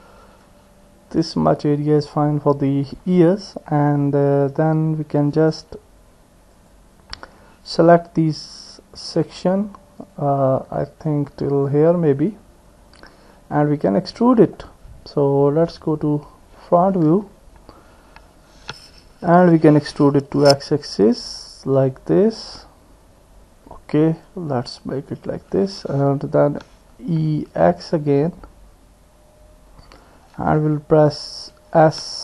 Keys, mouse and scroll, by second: 6.7 click, 9.2 click, 10.1 click, 13.6-14.6 drag, 13.6 middle click, 14.6 middle click, 15.9 click, 17.3 KP_1, 19.6 e, 26.5 e, 31.9 s.